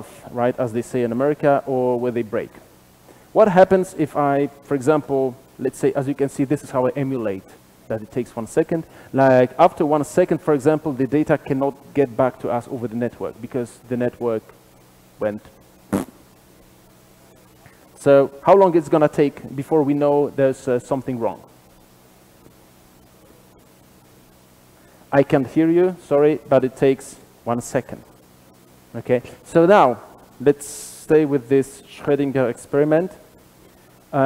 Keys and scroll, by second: 6.5 super+/, 24.0 shift+F10.